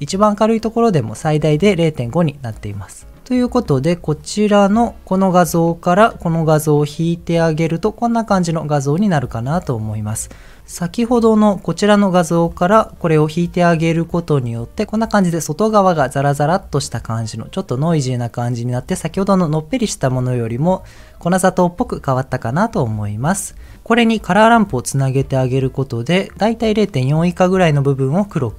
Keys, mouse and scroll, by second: 3.9 ctrl+shift+click, 4.2 ctrl+shift+click, 4.5 ctrl+shift+click, 6.0 ctrl+shift+click, 7.0 ctrl+shift+click, 10.4 ctrl+shift+click, 10.7 ctrl+shift+click, 10.9 ctrl+shift+click, 12.5 ctrl+shift+click, 14.0 ctrl+shift+click, 19.2 ctrl+shift+click, 19.5 ctrl+shift+click, 19.7 ctrl+shift+click, 20.9 ctrl+shift+click, 23.7 ctrl+shift+click, 24.9 ctrl+shift+click, 26.3 click.